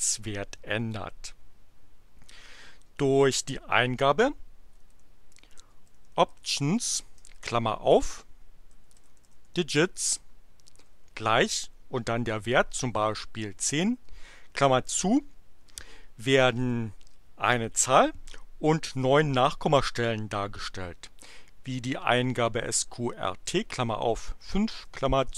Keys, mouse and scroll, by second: 4.5-7.3 typing, 8.4-10.8 typing, 12.7 1, 13.0 0, 13.9 shift+9, 16.6 Return, 21.6-24.8 typing, 25.2 shift+Return.